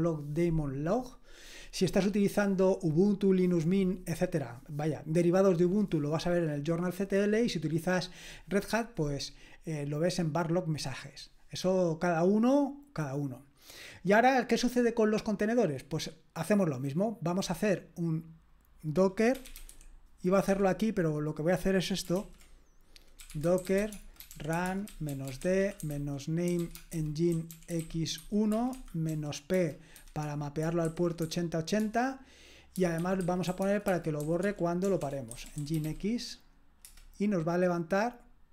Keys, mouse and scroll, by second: 9.6-13.0 scroll down 1, 13.0-15.3 scroll down 1, 15.3 scroll down 1, 15.5-16.5 scroll up 1, 16.5-17.9 drag, 17.9 middle click, 18.2 middle click, 18.5 middle click, 19.2-20.5 typing, 20.5 Escape, 21.2-22.2 drag, 22.2 ctrl+l, 23.1-36.0 typing, 36.8 Return.